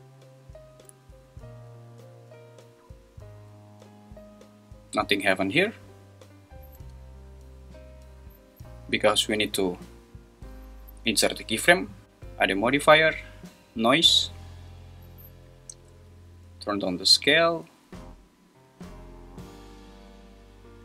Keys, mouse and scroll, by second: 6.8 space, 12.0-14.0 drag, 12.0 space, 15.6-18.1 drag, 18.7 space.